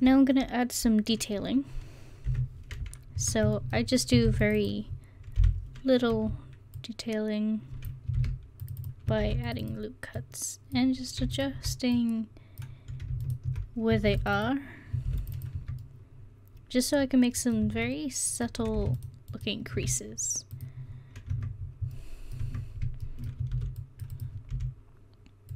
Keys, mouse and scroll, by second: 2.3 KP_1, 3.2 Tab, 4.3 ctrl+r, 5.4 o, 8.2 ctrl+r, 8.2 click, 9.2 ctrl+r, 10.2 click, 14.1 ctrl+r, 15.1 ctrl+r, 15.6 Tab, 17.6 Tab, 21.3 Tab, 22.4 Tab, 23.5 ctrl+r, 24.5 s.